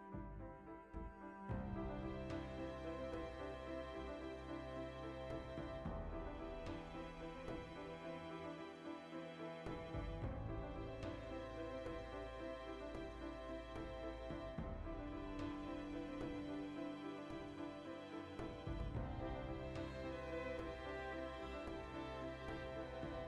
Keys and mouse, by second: 6.4-7.6 ctrl+shift+middle drag, 7.6 right drag, 7.8-8.9 middle drag, 8.9 right click, 9.1 ctrl+middle drag, 9.4 g, 9.6 right click, 9.8 ctrl+shift+middle click, 10.4 right click, 10.6-12.0 shift+middle drag, 12.0 Tab, 12.5-22.9 shift+middle drag, 17.3 i, 17.9 ctrl+z, 18.4 a, 22.9 click, 23.1-23.2 middle drag.